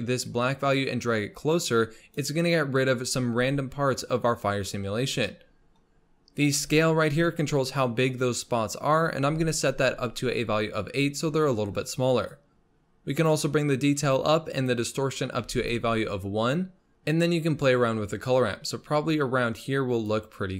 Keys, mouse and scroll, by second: 0.5-3.4 drag, 3.4-5.0 scroll up 1, 5.0 scroll down 3, 5.2-6.7 middle drag, 6.7-9.8 drag, 12.3-15.7 drag, 16.9-20.5 drag.